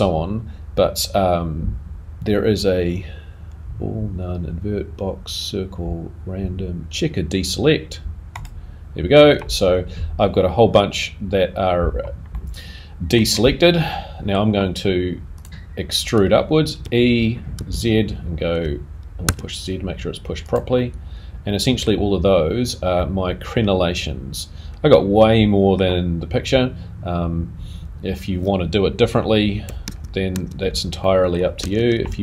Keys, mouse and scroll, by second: 11.8-14.1 scroll down 1, 14.1 middle click, 14.1-15.4 scroll down 1, 15.4 click, 20.7 middle click, 23.7 middle click, 30.7 super+z, 31.0 middle click.